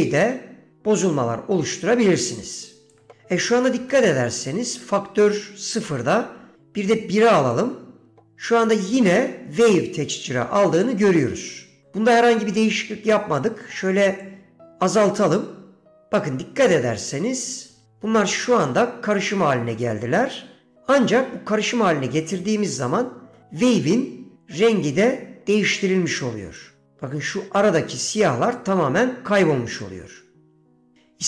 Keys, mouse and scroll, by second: 4.0 middle click, 6.6-7.7 drag, 14.3-17.1 drag, 26.7-27.9 drag, 29.9-31.0 drag.